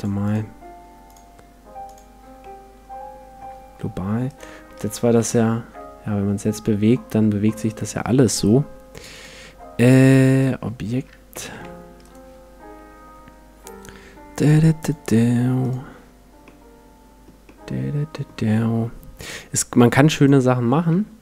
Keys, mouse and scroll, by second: 2.4-4.3 middle drag, 4.3-6.1 right drag, 5.1 g, 7.8-9.7 right drag, 9.1-11.0 drag, 11.3 g, 12.1-13.9 right drag, 14.8-16.7 drag, 16.5-19.3 middle drag, 19.3-21.2 drag, 20.9-21.2 middle drag.